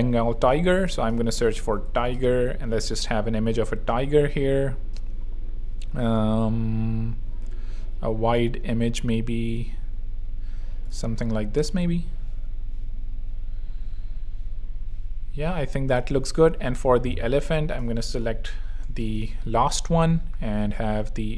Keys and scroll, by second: 1.2-2.5 typing, 18.0 super+e, 18.2-19.5 typing.